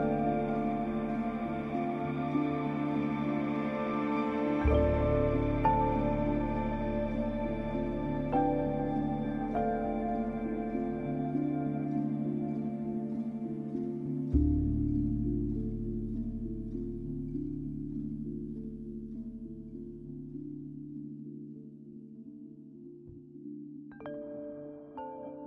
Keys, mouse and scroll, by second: 1.6 typing, 2.1 click, 3.2 scroll down 1, 4.3 scroll up 1, 4.6-4.9 typing, 5.4 scroll up 1, 6.0 scroll down 1, 6.9-7.8 scroll up 1, 7.8-8.4 scroll down 1, 10.5-11.9 scroll up 1, 11.9-12.9 scroll down 1, 13.6 ctrl+alt+shift+e, 14.2 ctrl+shift+a, 17.0-17.7 typing, 18.4 click, 19.4 scroll down 1, 20.2 scroll, 20.3 scroll down 1, 20.9 click.